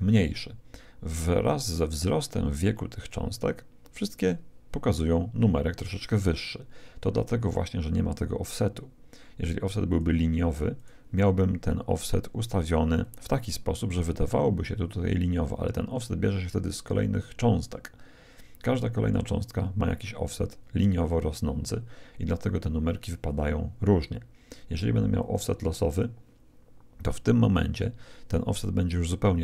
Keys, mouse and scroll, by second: 9.9-11.6 drag, 13.0-14.6 drag, 25.1-26.8 drag, 28.8-29.4 drag.